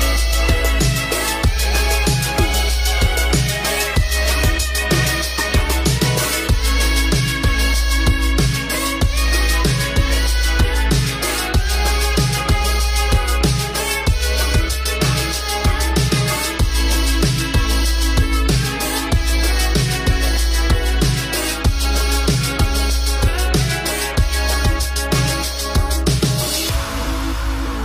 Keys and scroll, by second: 15.9 ctrl+l.